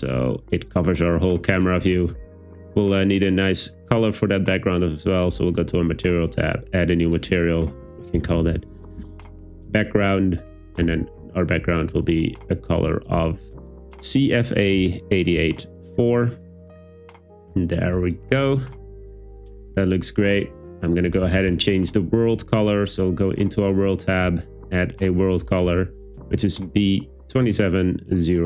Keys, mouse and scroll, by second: 0.6 click, 1.8 Tab, 3.6 drag, 4.4 click, 6.5 click, 7.2-9.0 drag.